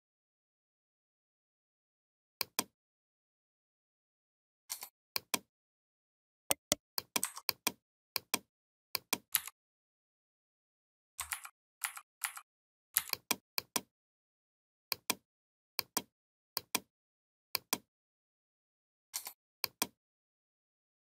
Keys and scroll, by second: 11.1 ctrl+z, 12.8 v.